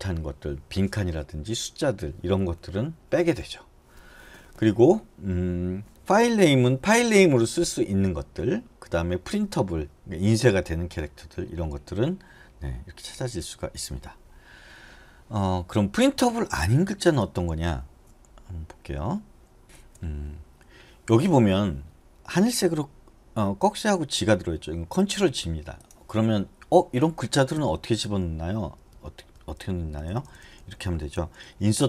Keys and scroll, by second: 19.6 BackSpace, 27.7-31.3 typing.